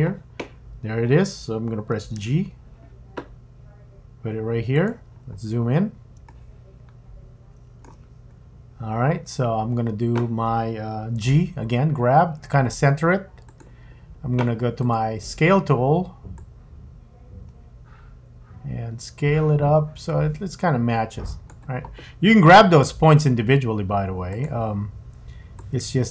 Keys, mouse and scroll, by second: 2.1 g, 5.1-6.2 scroll up 6, 6.2 shift+middle click, 8.3 scroll up 1, 8.5-9.3 scroll down 2, 12.1 g, 14.8 click, 16.4 click, 22.8 g, 25.6 click.